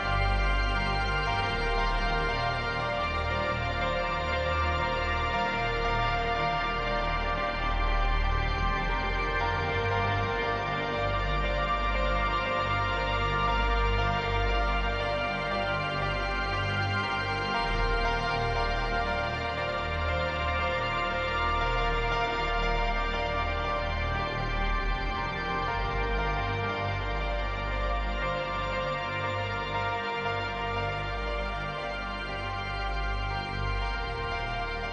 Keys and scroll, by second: 2.3 space, 6.2 space, 9.6 space, 13.3 space, 21.1 space, 23.7 space, 28.3 space, 29.9 space.